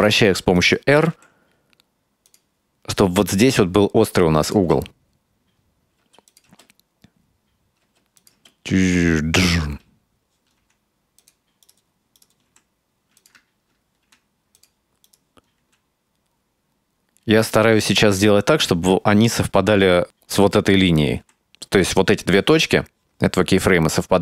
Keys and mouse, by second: 0.6 right click, 4.5 click, 4.6 space, 6.1 space, 6.3 click, 6.5 space, 7.9 space, 8.2 click, 8.4 space, 9.7 space, 10.6 r, 11.7 right click, 12.2 right click, 12.5 r, 14.1 r, 15.1 right click, 15.6 r, 21.4 r.